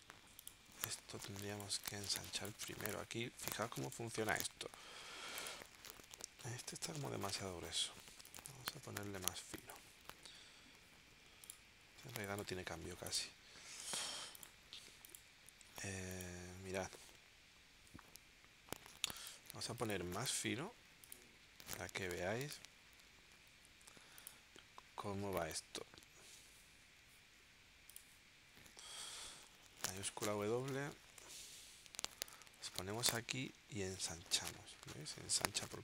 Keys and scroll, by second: 0.7 BackSpace, 1.3 space, 3.6 space, 12.1 space, 31.0 shift+w.